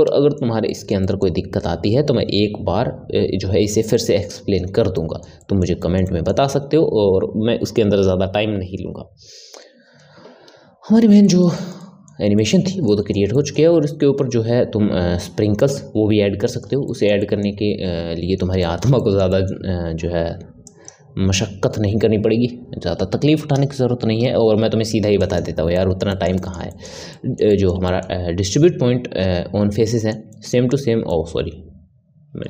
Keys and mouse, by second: 0.0-9.1 middle drag, 11.2-20.6 middle drag, 20.6 click, 25.7-32.4 middle drag.